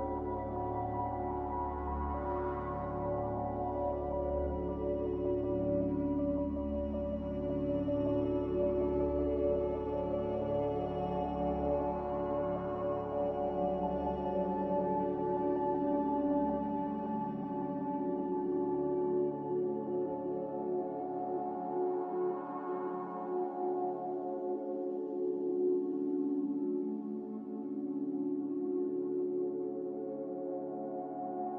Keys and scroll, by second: 7.6 g, 11.0 ctrl+z, 20.6 z.